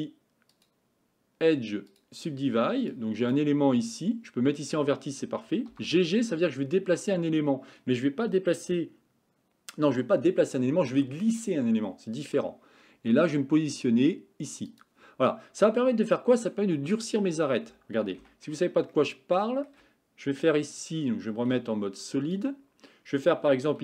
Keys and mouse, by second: 0.6-2.0 drag, 3.1 click, 5.7 g, 18.3 Tab, 18.9-19.7 shift+middle drag, 21.5 z.